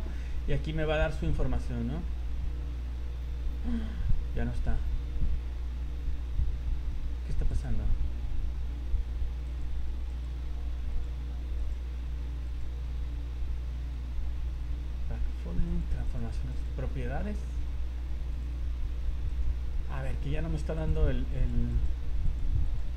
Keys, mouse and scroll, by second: 0.0 scroll down 1, 0.1 scroll down 1, 0.5-3.2 scroll down 46, 3.2-5.4 scroll up 33, 5.9-6.8 scroll up 14, 7.5 click, 9.4 click, 10.1 click, 10.9 click, 11.6 click, 12.4 click, 15.6 click, 16.0 click, 16.7 click, 17.2 scroll down 4, 18.3 click, 18.6 scroll up 1, 18.9 scroll down 2, 19.3 right click, 19.9-20.3 scroll up 8, 20.7 click, 21.4 click, 21.7 click, 22.2 click, 22.6 click.